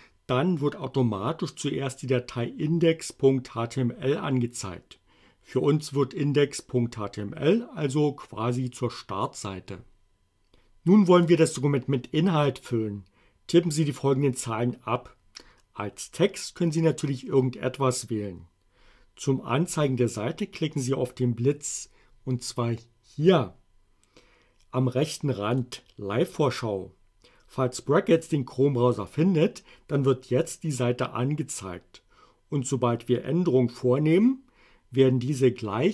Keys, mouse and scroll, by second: 25.5 click.